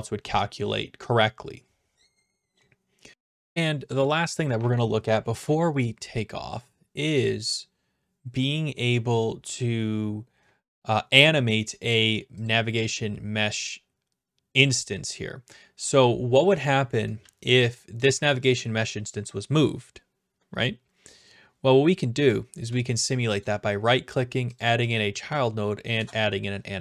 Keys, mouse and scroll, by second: 3.1 click, 12.5-13.5 drag, 17.2-17.9 d, 18.0 right click, 23.4 right click, 24.9 click, 25.9 Return.